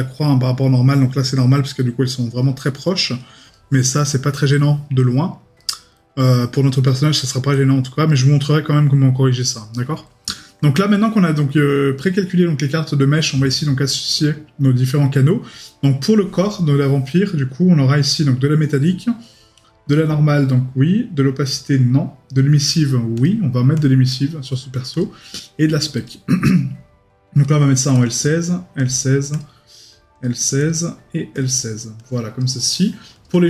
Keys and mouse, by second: 3.5 right click, 4.6 middle click, 9.7 right click.